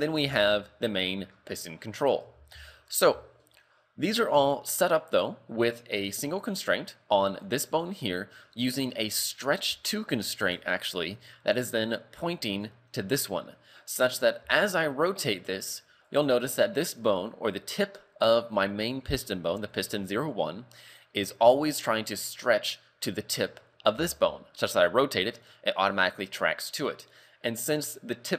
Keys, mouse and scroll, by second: 0.2 g, 1.3 scroll down 5, 1.8 scroll up 3, 2.4 Tab, 2.7 shift+middle click, 3.3 shift+middle click, 3.9 scroll up 3, 4.1 scroll down 1, 4.6 shift+middle click, 7.3 right click, 9.9 click, 12.5 right click, 14.4 r, 19.7 right click, 20.9 right click, 21.5 right click, 24.2 r.